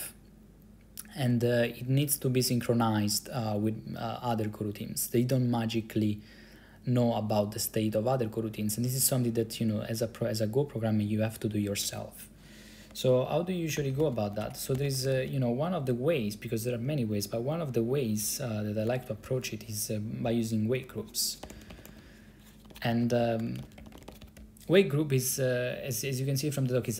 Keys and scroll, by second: 13.9 ctrl+c, 14.1-15.6 typing, 21.3-24.8 typing.